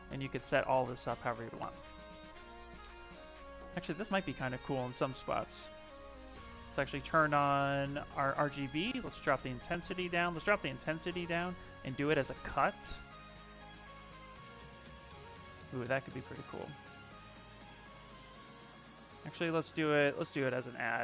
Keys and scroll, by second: 1.2 ctrl+z, 1.5 ctrl+z, 1.7 ctrl+z, 2.3 ctrl+z, 3.2 ctrl+z, 4.6 space, 6.5 space, 14.1 z, 14.6 s, 15.4 space, 19.1 space.